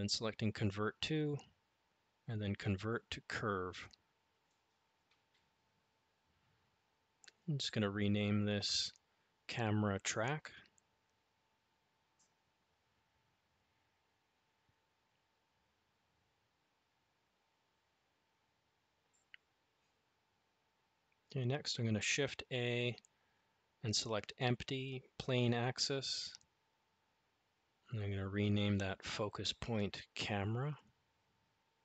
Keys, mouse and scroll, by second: 8.3 click, 8.7-14.5 drag, 18.2 click, 19.8 shift+a, 28.4-31.8 drag.